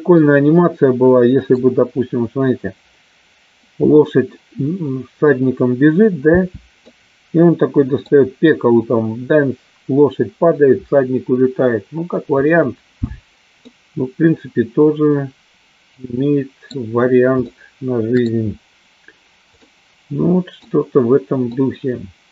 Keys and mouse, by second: 0.2 space, 0.6-2.1 middle drag, 7.1-8.1 middle drag, 7.1 space, 13.9-16.9 middle drag, 17.6 shift+middle click, 19.7-20.9 middle drag, 21.6-22.3 middle drag.